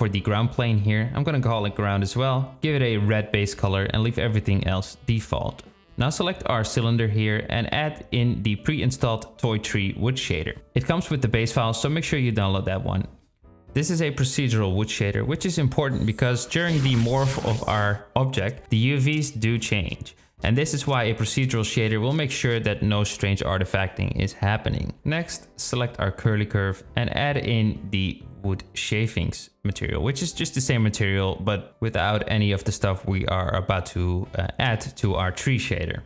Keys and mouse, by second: 1.5 click, 1.7-3.6 drag, 4.0 click, 6.8 click, 9.1-13.6 drag, 18.7 click, 19.4-21.0 drag, 26.5 click, 27.9-30.2 drag, 32.1-35.0 drag.